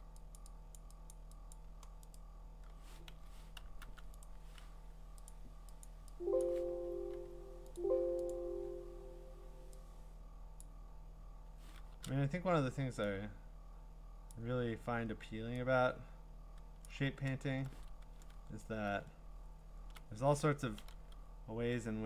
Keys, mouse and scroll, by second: 0.4 click, 0.8 click, 1.1 click, 1.5 click, 2.2 right click, 3.1 Escape, 3.8 u, 4.2 right click, 5.3 click, 5.9 click, 6.4 click, 6.8 Escape, 7.1 Escape, 7.8 click, 8.3 click, 10.6 click, 11.9 ctrl+z, 14.3 click, 16.8 click, 17.5 scroll, 18.2-19.0 ctrl+scroll, 19.5 scroll.